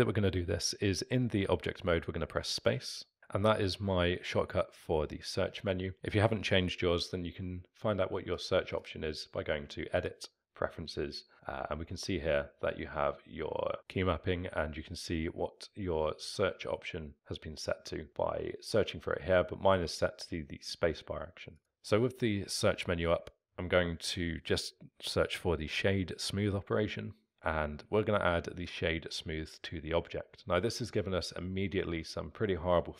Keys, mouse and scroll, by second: 3.2 space, 8.8-11.5 drag, 21.6 space, 30.8-32.9 alt+middle drag.